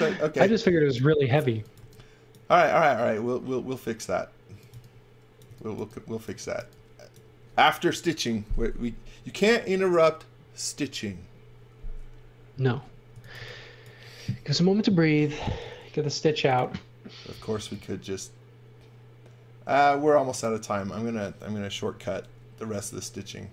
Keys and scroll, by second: 0.4-2.2 typing, 4.2-7.0 typing, 13.1 x, 13.3 v, 15.6 a, 20.7 b, 21.7 super+z.